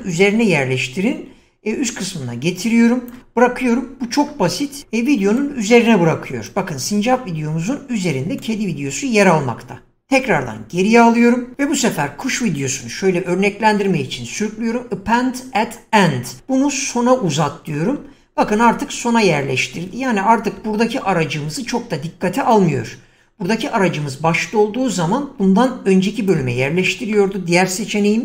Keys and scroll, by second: 10.1 ctrl+z, 20.4 <.